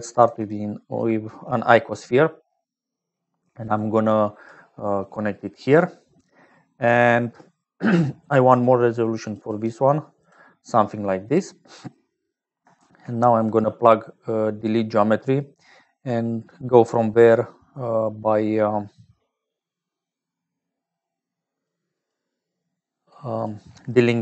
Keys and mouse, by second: 1.4 click, 2.6 click, 3.4 click, 4.2 click, 4.9-6.1 drag, 6.7 click, 9.3 right click, 10.1 right click, 10.9 click, 12.7 shift+a, 22.7 click.